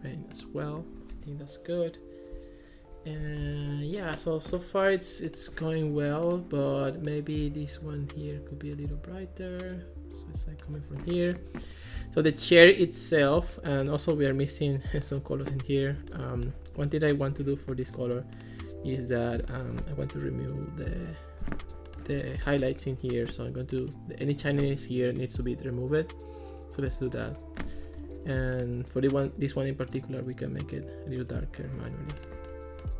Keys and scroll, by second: 20.2 0, 21.0 Return, 27.0 0, 27.2 Return.